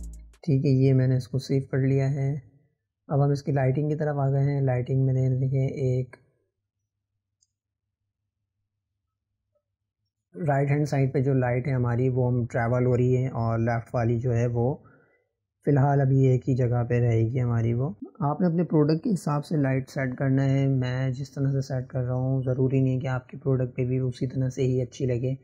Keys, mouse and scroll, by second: 3.9-6.9 drag, 13.2 click, 15.4-17.9 middle drag, 23.3 click.